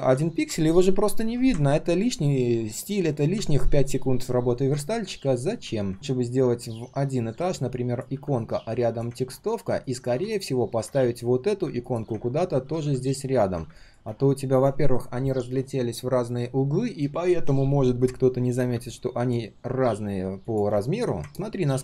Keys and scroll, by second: 12.6 ctrl+z, 12.8 ctrl+z.